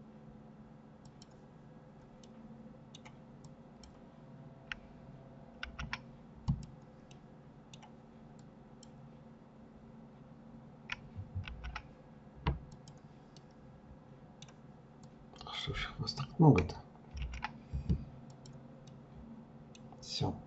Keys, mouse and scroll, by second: 1.3-2.5 middle drag, 2.5-4.7 drag, 4.7 alt+m, 6.1-7.4 middle drag, 7.4-10.4 drag, 10.5 alt+m, 12.4-14.1 middle drag, 14.1-16.2 drag, 16.2 alt+m, 17.9 middle click, 18.8-19.6 scroll down 4, 19.6-20.4 middle drag.